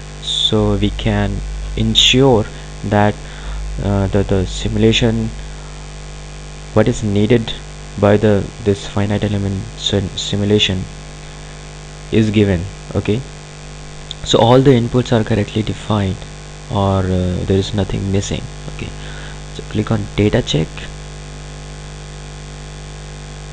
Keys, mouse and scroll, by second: 21.1 click.